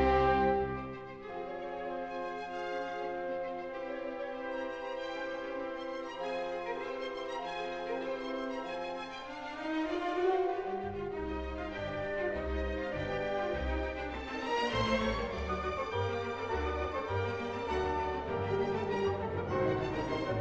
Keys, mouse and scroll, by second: 0.5 click, 2.3-3.4 scroll, 10.5 click, 11.1-12.2 scroll, 13.8 s, 18.2 Escape, 18.5-18.9 scroll, 19.5 scroll, 20.3 click.